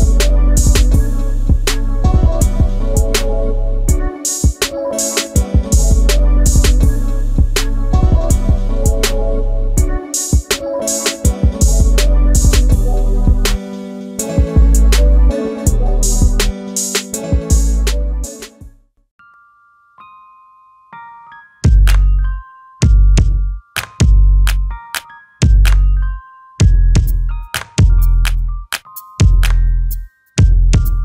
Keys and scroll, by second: 15.6 space, 18.5 m.